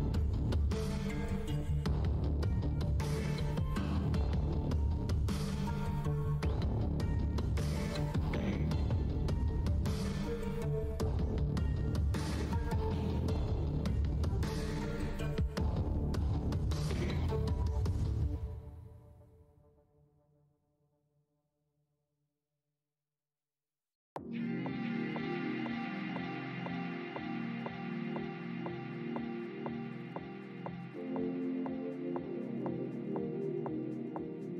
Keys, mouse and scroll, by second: 2.2 alt+click, 5.4 click, 7.2 alt+click, 8.9 alt+w, 8.9 shift+x, 9.4 alt+click, 10.0 z, 10.6 shift+d, 10.8 shift+x, 12.3 space, 13.2-13.8 scroll down 1, 14.2 space, 15.7 click, 18.9-20.0 typing, 21.4-22.8 typing, 22.3 click, 25.2 space, 26.4 alt+click, 26.9-27.6 scroll up 1, 27.9 alt+click, 28.1 scroll up 1, 28.1 w, 29.6 alt+click, 29.8 shift+d, 30.7 alt+click, 32.3 Delete, 33.3 alt+click.